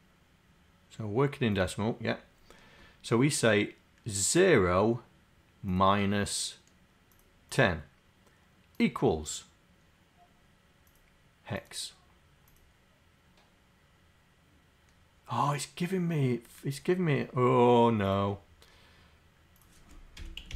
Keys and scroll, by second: 20.2 c.